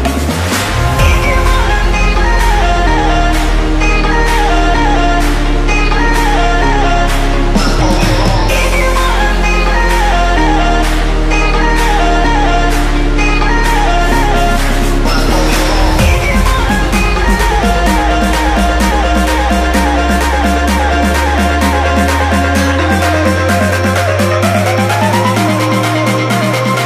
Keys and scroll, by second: 0.0 shift+Left, 2.4 space, 4.9 space, 5.1 shift+a, 5.7 KP_Decimal, 8.4 shift+Left, 8.5 space, 11.4 space, 11.7 space, 14.0 KP_Decimal, 22.1 space, 24.4 KP_0, 26.2 KP_0, 26.5 shift+Left.